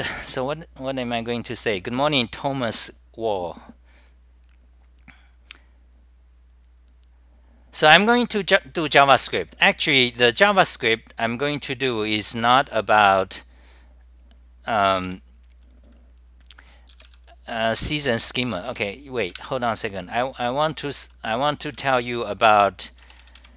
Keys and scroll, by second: 21.6-22.3 typing.